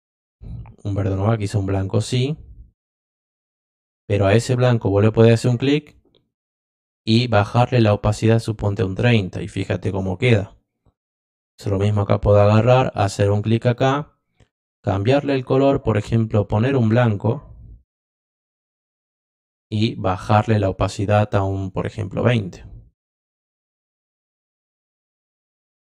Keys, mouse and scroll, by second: 0.3 click, 1.1 click, 3.5 click, 5.5 click, 7.3 click, 8.6 click, 11.5 click, 13.2 click, 15.2 click, 15.4 click, 17.0 click, 19.4 click, 20.4 click, 21.6 click, 24.0 click.